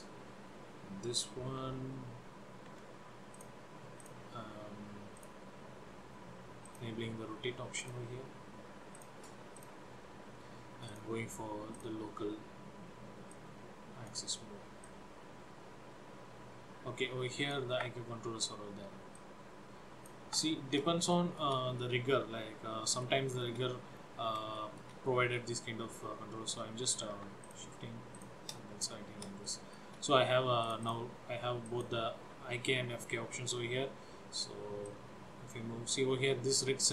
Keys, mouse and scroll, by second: 1.7 g, 3.4 click, 4.2 click, 5.3 click, 7.9 click, 11.0 click, 15.1 click, 18.2 ctrl+z, 19.3 click, 20.8 ctrl+z, 21.2 shift+middle click, 22.0 middle click, 23.5-24.2 shift+scroll down 3, 24.7 shift+middle click, 25.3 middle click, 27.6 shift+click, 28.3 shift+click, 29.6 shift+middle click, 30.7 click, 30.9 click, 31.8 click, 34.8 click, 35.1 click.